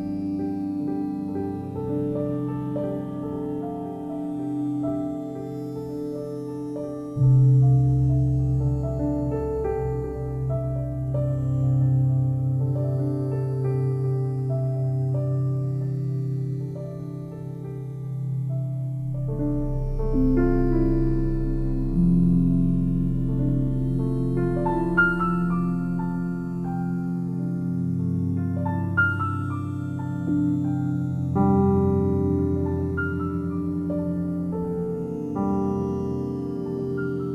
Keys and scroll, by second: 1.4 ctrl+t, 29.8 ctrl+z, 30.6 [.